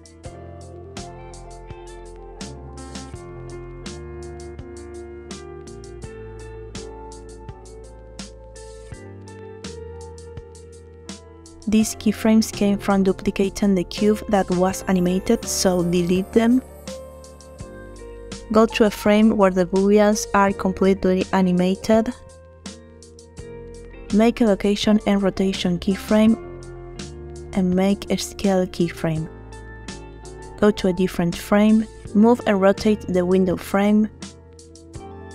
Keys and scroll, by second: 0.9 shift+f, 5.7 Tab, 16.9 Delete, 27.6 i.